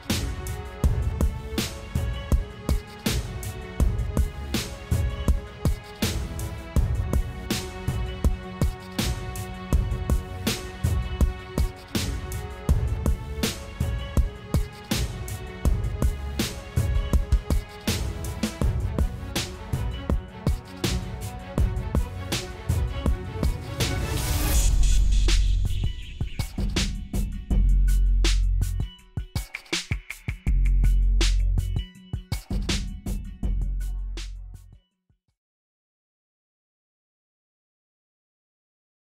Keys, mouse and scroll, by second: 8.6 middle click, 21.3 click, 21.8 click, 23.1 shift+click, 28.4 middle click.